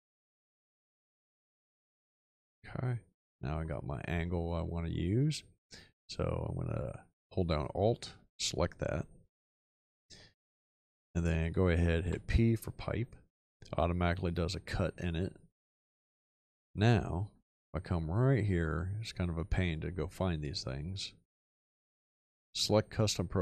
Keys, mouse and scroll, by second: 1.9 x, 12.0 p.